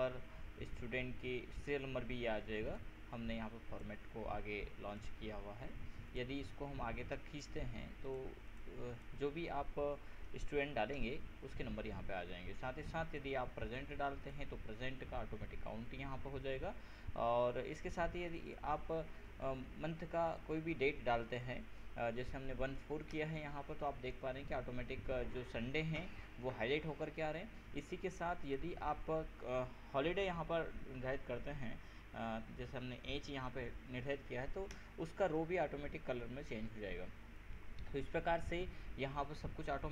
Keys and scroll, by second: 10.5 ctrl+a, 10.6 ctrl+j, 11.1 ctrl+Return, 21.4 ctrl+BackSpace, 22.0 ctrl+4, 23.3 ctrl+Return, 30.3 ctrl+h, 34.9 ctrl+Return.